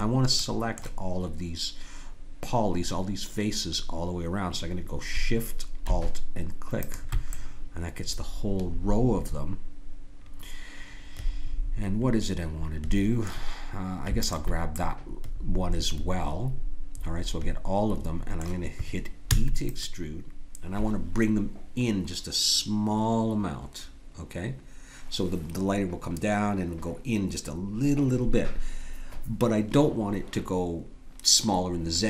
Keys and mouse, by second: 0.4-2.3 middle drag, 6.8-8.8 drag, 8.8 middle click, 14.2-16.2 drag, 16.2 middle click, 19.2 e.